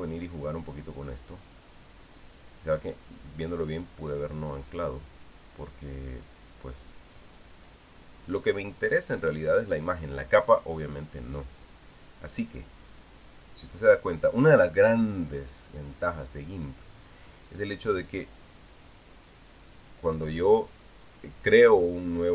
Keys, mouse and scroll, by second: 0.7 click, 5.6-10.3 drag, 12.1 click, 13.7 click, 16.3 click.